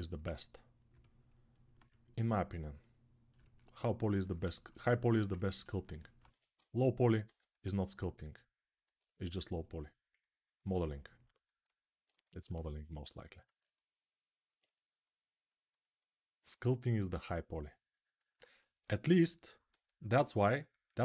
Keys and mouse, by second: 6.0 1, 7.0 ctrl+z, 9.9-21.0 ctrl+right drag.